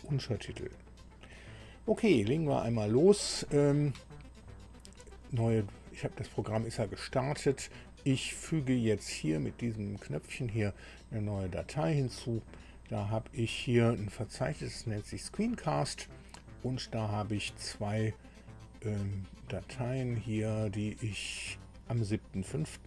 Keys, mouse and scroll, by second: 9.6 click, 20.0 click, 20.7 ctrl+click.